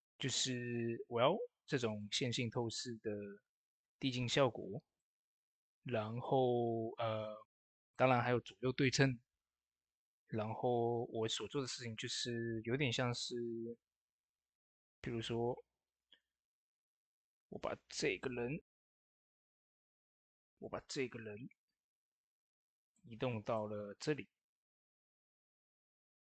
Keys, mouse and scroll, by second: 5.7-7.2 scroll up 1, 7.2 click, 11.1 click, 11.1 typing, 14.0 m, 15.4-16.4 typing, 16.1 click, 18.2 ctrl+shift+c, 19.3 click, 20.1 ctrl+shift+c, 20.9 click, 21.8 v, 22.0 click, 23.1-26.3 drag.